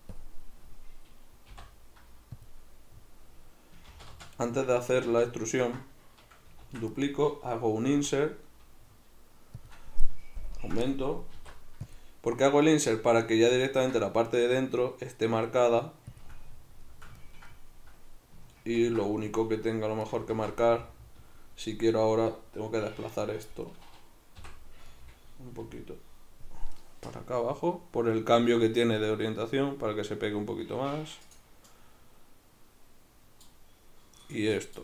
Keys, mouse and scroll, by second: 1.5 i, 2.5 click, 3.9 ctrl+z, 6.6 shift+d, 7.0 right click, 8.0 i, 9.7 click, 10.4 ctrl+KP_Add, 11.4 alt+e, 16.2 shift+click, 16.4-20.2 middle drag, 18.8 ctrl+r, 20.2 right click, 20.4 ctrl+z, 20.7-23.1 middle drag, 23.1 right click, 23.7-31.3 middle drag, 24.4 o, 25.6 g, 31.3 click, 31.7-34.2 middle drag, 34.2 right click, 34.5-34.8 middle drag.